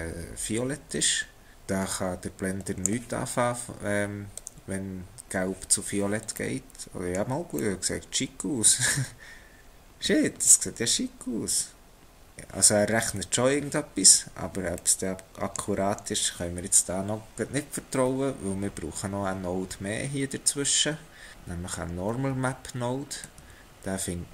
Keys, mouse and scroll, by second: 1.5 click, 6.4 middle click, 7.7 middle click, 10.5 middle click, 14.8 middle click, 23.2 shift+a.